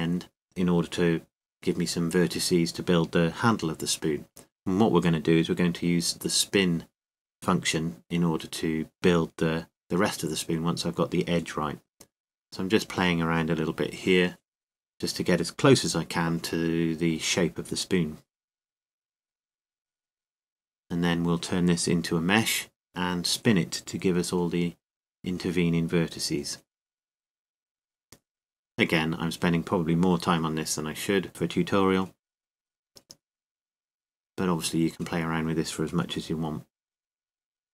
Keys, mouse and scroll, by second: 1.8-3.5 drag, 5.9-8.5 right drag, 6.9 g, 9.8-10.9 drag, 10.5 right click, 10.9 g, 11.3-14.1 middle drag, 20.7 click, 21.6 middle click, 21.9 g, 22.5 right click, 24.0 click, 25.9 g, 26.3 g, 28.9 click, 30.4 g, 31.3 g, 34.5 g, 36.6-37.7 drag.